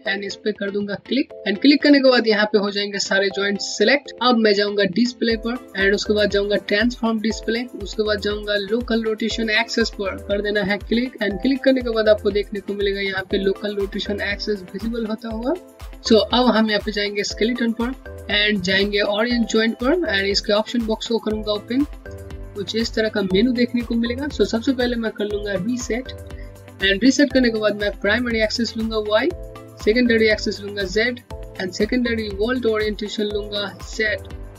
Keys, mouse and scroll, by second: 1.3 click, 5.0 click, 10.2 click, 17.4 click, 21.1 click, 28.7 click, 33.7 click.